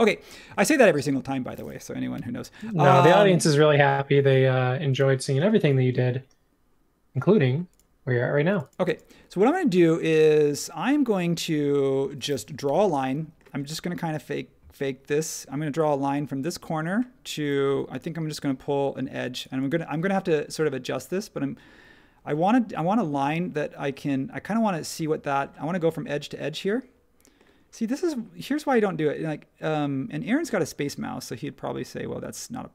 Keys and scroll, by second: 0.6 space, 2.1 |, 12.6 |, 17.6 Home.